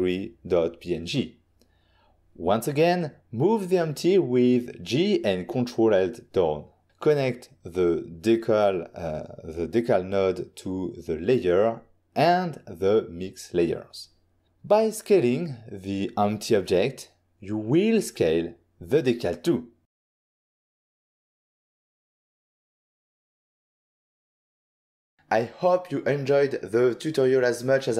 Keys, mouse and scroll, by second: 0.3 double click, 1.9 g, 4.6 ctrl+click, 5.4 ctrl+click, 7.9 click, 8.7 click, 9.6 middle click, 10.6 middle click, 11.8 click, 13.3 click, 14.9 click, 15.4 s, 19.0 click, 21.2 middle click, 21.7 middle click, 23.7 middle click, 24.3 middle click.